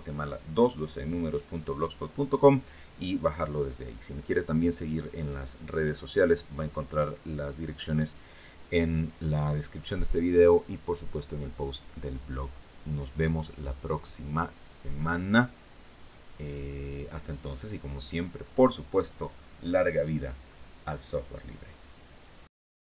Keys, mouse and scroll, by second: 21.9 click, 22.9 click.